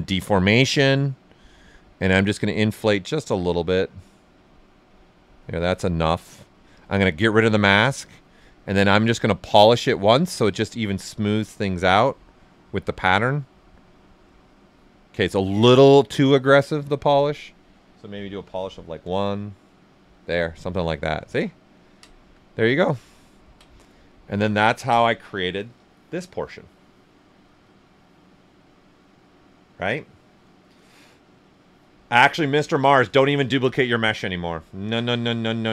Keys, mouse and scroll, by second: 0.3-8.6 drag, 15.3 click, 15.5 ctrl+z, 16.7 click, 18.3 1, 18.9 Return, 21.4 Return, 21.6 ctrl+right click, 23.2 ctrl+right click.